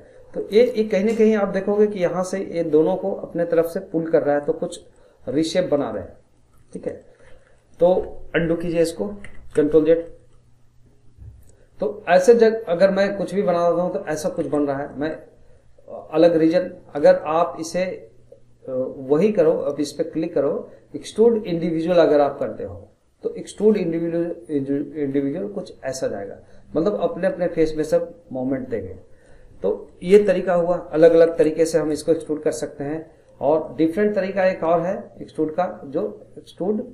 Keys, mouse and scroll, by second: 0.6 scroll up 1, 0.9 middle click, 1.7 scroll down 1, 2.0-6.2 middle drag, 6.2 scroll up 1, 6.4-9.2 middle drag, 9.2 ctrl+z, 10.1-12.1 middle drag, 12.1 click, 14.4 ctrl+z, 14.9-19.5 middle drag, 19.5-22.7 drag, 24.5 click, 30.0 ctrl+z, 30.7 middle click, 31.3 ctrl+z, 32.0-33.6 middle drag, 33.6-36.7 drag.